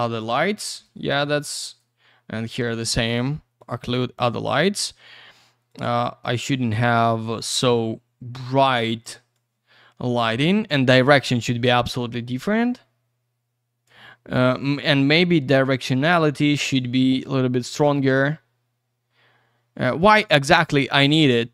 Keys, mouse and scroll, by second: 0.8 click, 1.6 click, 1.8 click, 3.6 click, 3.7 click, 5.7 click, 5.8 click, 7.3 click, 9.3 click, 11.4 click, 14.7 click.